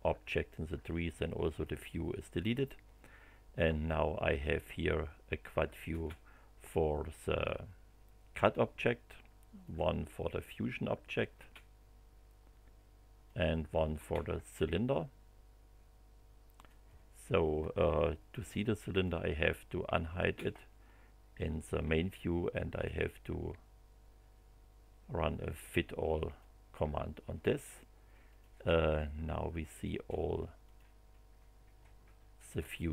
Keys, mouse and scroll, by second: 4.3 click, 5.9 space, 9.6 click, 11.3 space, 13.2 click, 13.9 space, 16.5 click, 18.9 click, 20.1 space, 22.7 click, 26.2 click, 28.3 click, 30.6 click, 32.8 click.